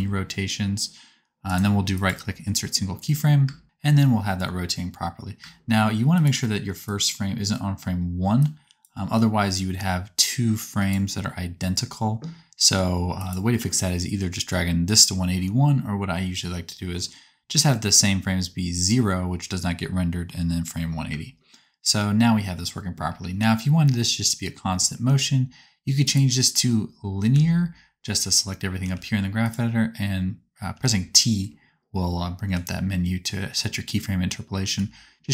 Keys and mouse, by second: 3.4 space, 5.4 space, 6.1 click, 21.1 space, 22.9 space, 25.0 t, 27.2 a, 28.7 t, 30.6 t, 32.3 t, 34.7 t.